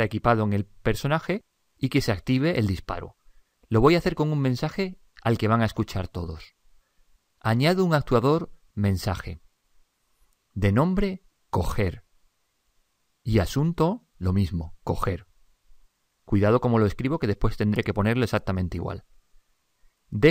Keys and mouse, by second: 7.7-10.4 middle drag, 9.0 click.